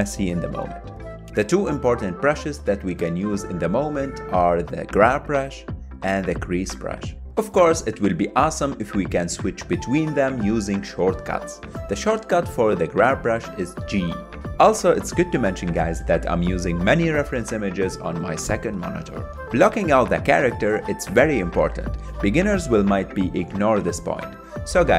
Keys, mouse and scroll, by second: 1.1 KP_1, 1.3-2.8 drag, 2.8 middle click, 2.9 click, 3.2 middle click, 3.3 click, 3.7 middle click, 3.8 click, 4.7 middle click, 5.0 KP_1, 5.1 ctrl+Tab, 5.2 click, 5.4 ctrl+Tab, 5.6 ctrl+shift+middle click, 5.8 f, 5.9 click, 6.0 ctrl+z, 6.5 click, 7.2 KP_3, 7.3-8.7 drag, 8.7 f, 8.8 click, 9.1 middle click, 9.4 click, 9.5 middle click, 9.6 click, 9.8 middle click, 10.0 KP_1, 10.1 ctrl+middle click, 10.3 click, 10.5 middle click, 10.7 click, 10.8 middle click, 11.0 ctrl+Tab, 11.2 ctrl+Tab, 11.5 KP_1, 11.5 ctrl+middle click, 11.7 click, 11.8 middle click, 11.9 click, 12.2 middle click, 12.3 click, 12.5 middle click, 12.6 click, 12.7 middle click, 12.8 click, 12.9 middle click, 13.0 click, 13.1 middle click, 13.2 click, 13.6 middle click, 13.7 click, 13.9 middle click, 14.0 click, 14.3 middle click, 14.4 click, 14.5 middle click, 14.5 click, 14.6 middle click, 14.8 click, 15.2 middle click, 15.3 click, 15.4 middle click, 15.5 click, 15.6 middle click, 15.7 click, 15.8 middle click, 15.9 click, 16.0 middle click, 16.3 KP_1, 16.4 ctrl+middle click, 16.9 click, 17.1 middle click, 17.2 click, 17.5 KP_1, 17.7 click, 18.2 ctrl+z, 18.3 ctrl+z, 18.3-19.7 drag, 19.7 ctrl+middle click, 20.0 click, 20.3 ctrl+middle click, 20.7 click, 20.8 ctrl+z, 20.9 click, 21.1 middle click, 21.3 click, 21.5 middle click, 21.8 click, 22.1 ctrl+middle click, 22.4 KP_1, 22.6 ctrl+shift+middle click, 22.8 click, 23.0 ctrl+z, 23.2 ctrl+Tab, 23.3 click, 23.4-24.0 ctrl+middle drag, 24.0 click, 24.0 ctrl+Tab, 24.3 middle click, 24.5 click, 24.6 ctrl+middle click, 24.8 click.